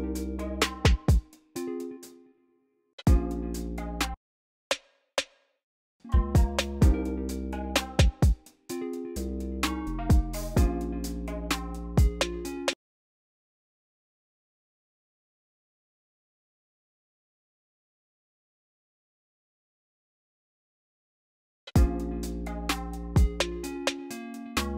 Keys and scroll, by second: 1.5 space, 2.9 space, 3.8 s, 5.8 s, 6.1 v, 10.2 ctrl+b, 11.4-12.6 typing, 15.2 m, 15.5 BackSpace, 18.0-18.8 typing, 21.1-21.6 typing.